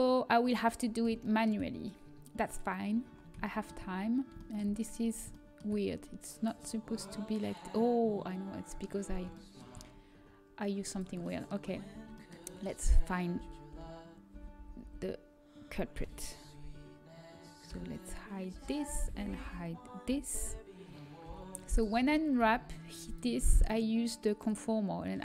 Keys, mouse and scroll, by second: 10.6-12.4 drag, 11.1-12.4 right drag, 13.3 l, 13.8 l, 14.2 l, 15.6 l, 17.6-19.3 typing, 21.2 j, 21.2 h, 22.6 a.